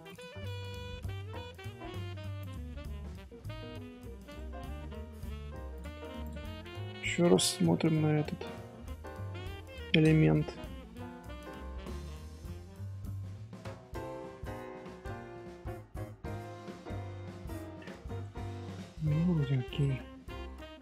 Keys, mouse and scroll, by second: 0.2 scroll down 1, 0.2 scroll up 1, 0.3 Tab, 0.7-2.4 middle drag, 2.4 click, 3.1 middle click, 3.4 z, 4.3-5.7 middle drag, 5.7 click, 6.2 click, 7.3 shift+h, 7.5-8.1 middle drag, 8.1 Tab, 8.6-9.7 middle drag, 9.7 Tab, 10.1-11.9 shift+middle drag, 11.9 Tab, 12.6 middle click, 13.4 scroll up 1, 13.9 Tab, 17.5-20.8 middle drag.